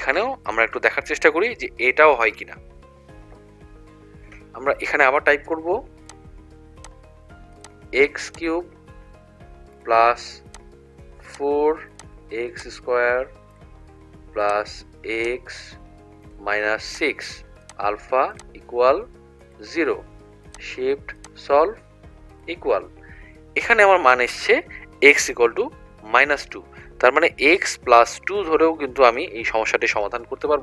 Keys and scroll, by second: 0.5 1, 6.8 ), 10.5 4, 11.9 ), 15.3 ), 16.3 -, 17.0 6, 19.5 0, 22.4 =.